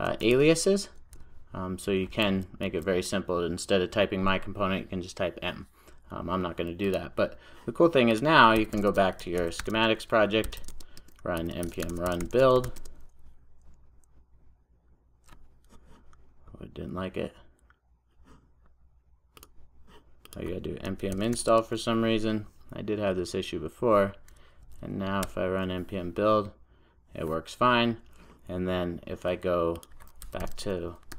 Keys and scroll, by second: 2.2 super+z.